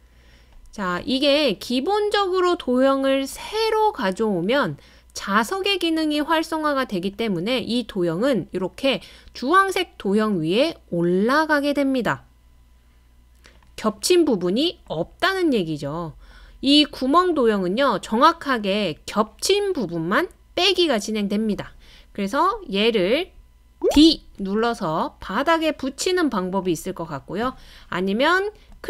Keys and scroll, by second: 24.0 d.